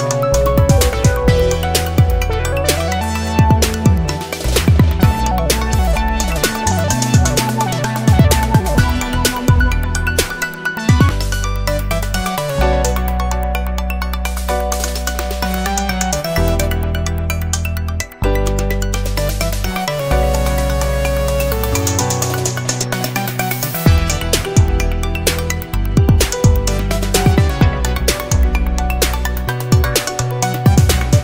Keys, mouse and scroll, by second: 2.5-3.0 scroll up 4, 3.9 scroll up 2, 5.0-9.4 drag, 11.1 click, 12.1 click, 12.6 click, 14.1 scroll up 1, 15.1-22.3 drag, 23.7 click, 24.7-25.7 scroll down 1, 25.7 click, 26.2 click, 28.7 click, 29.6 click, 31.1 click.